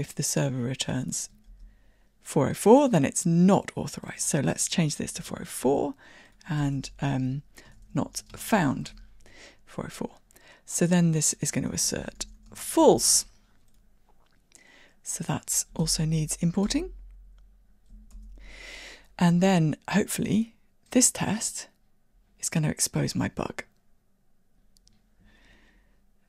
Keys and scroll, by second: 0.0 super+c, 5.4 super+v, 15.9 alt+Return.